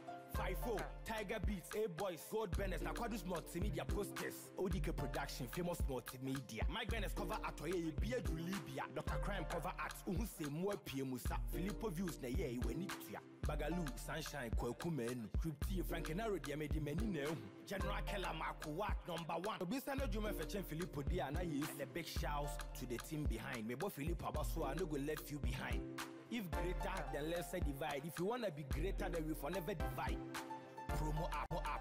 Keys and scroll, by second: 11.6 ctrl+l, 20.2 ctrl+u, 31.3 ctrl+-.